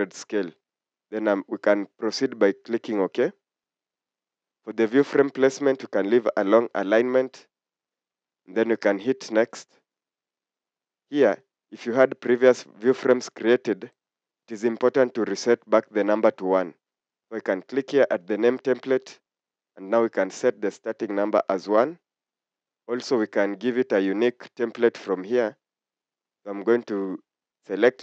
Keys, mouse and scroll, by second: 21.5 1.